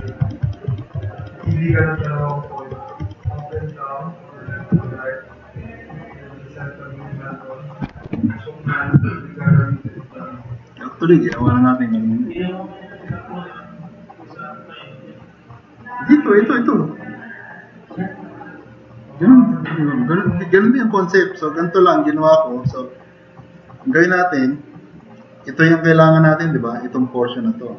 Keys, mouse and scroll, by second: 9.1 click, 9.5-10.0 drag, 21.4 click, 25.4 click, 26.5-27.7 drag.